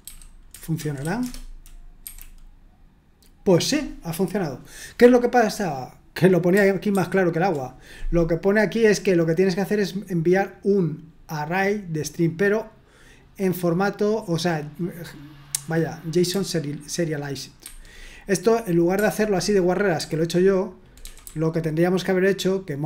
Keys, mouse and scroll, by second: 0.0-1.8 typing, 2.0 F5, 6.9 super+2, 8.3 scroll down 1, 12.9-16.0 drag, 17.6 super+1, 18.7 click, 18.9 Escape, 19.9 typing, 21.0-22.8 typing.